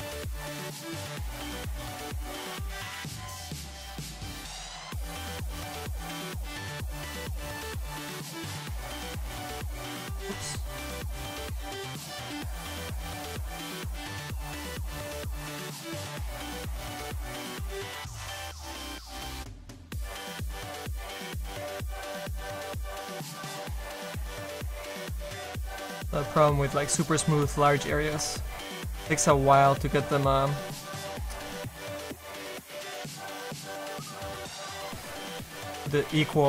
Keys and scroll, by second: 9.8 z, 14.2 s.